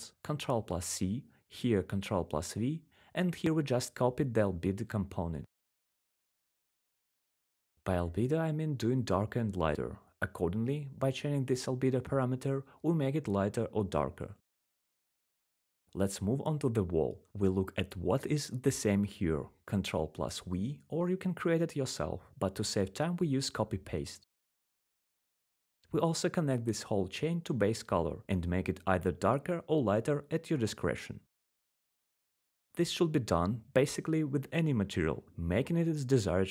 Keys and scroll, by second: 2.8 ctrl+v, 22.5 ctrl+v.